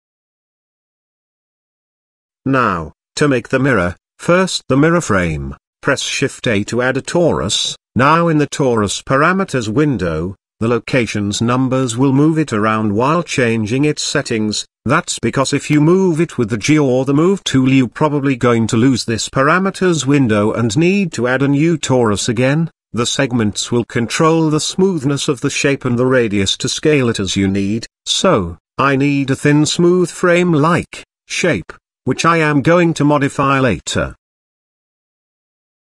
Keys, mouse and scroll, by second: 0.4 click, 3.4 click, 3.9 click, 5.4 shift+a, 8.8 KP_7, 9.4 z, 11.6 click, 12.5-13.0 shift+middle drag, 16.3-17.4 drag, 18.4 click, 21.4-22.8 drag, 23.9-25.7 drag, 26.8-28.4 drag, 28.9-30.1 drag, 30.6-32.3 drag, 33.4 z, 34.2 shift+middle click, 35.5 shift+middle click.